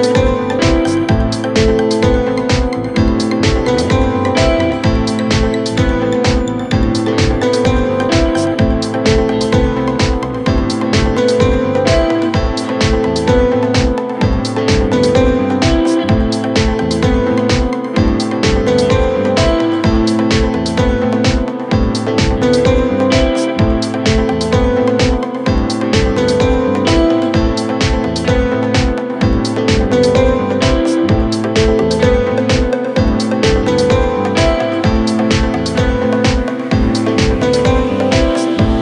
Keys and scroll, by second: 24.2 w, 25.2 d, 35.5 f.